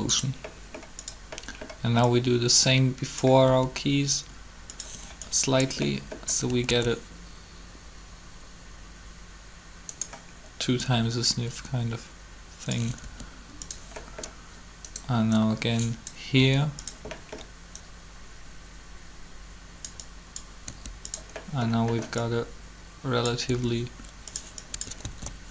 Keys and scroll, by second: 3.4 r, 6.5 alt+a, 13.0 r, 16.4 r, 20.6 r, 23.5 r, 25.0 alt+a.